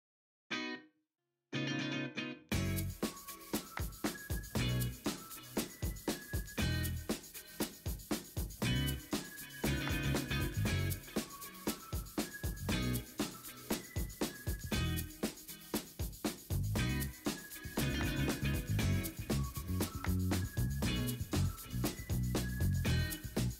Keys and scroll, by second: 0.1 d, 11.1 ctrl+alt+shift+e.